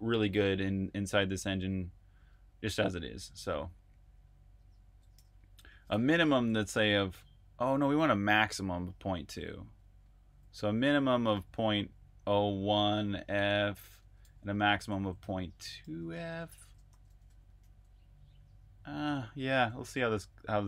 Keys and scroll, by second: 5.0-6.1 typing, 10.1 BackSpace, 11.4-20.6 typing.